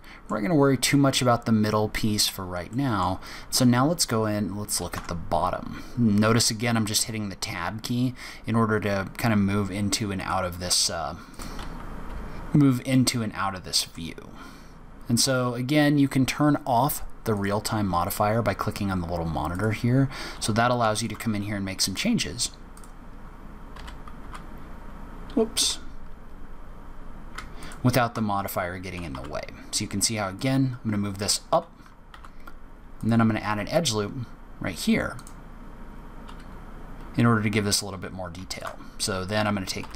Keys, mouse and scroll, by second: 2.0-2.5 scroll down 6, 2.6 middle click, 3.5-4.9 scroll up 9, 4.9 Tab, 4.9 scroll up 2, 10.1 click, 11.2 click, 11.6 z, 12.3-13.0 scroll up 6, 12.8 middle click, 17.3 click, 19.4 click, 20.8 alt+click, 21.0 alt+click, 22.7 click, 23.7 g, 27.5 alt+click, 28.9 g, 30.3 alt+click, 38.4 alt+click, 39.7 g.